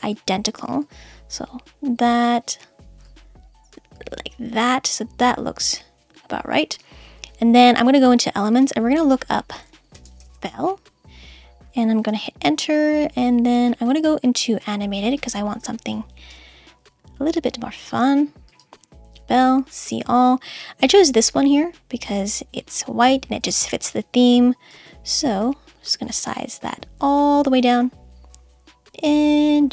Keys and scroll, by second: 12.1 Return, 16.3 Return.